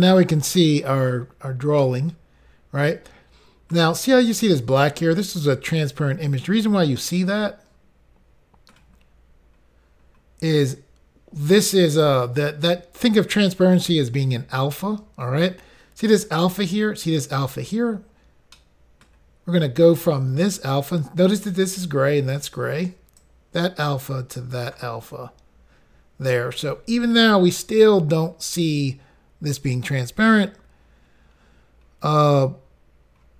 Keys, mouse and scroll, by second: 1.8 middle click, 7.0 middle click, 9.0 scroll down 3, 18.6 middle click, 23.2 click, 31.5 scroll down 3.